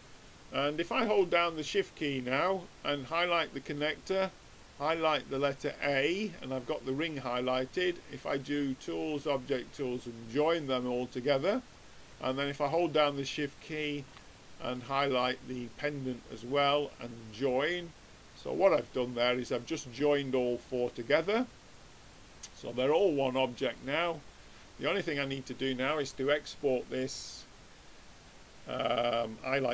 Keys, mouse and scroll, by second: 2.5-5.9 drag, 8.4-10.1 drag, 13.5 click, 14.8-16.6 drag, 19.5-21.3 middle drag, 21.7-23.3 drag, 24.4-26.1 middle drag, 26.7-28.4 drag.